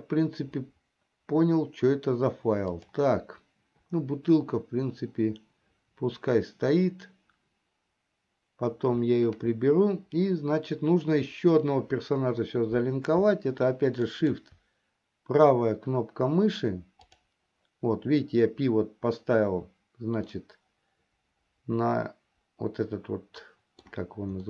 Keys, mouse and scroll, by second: 3.0 click, 14.5 shift+right click, 17.4 click, 20.9-24.4 middle drag.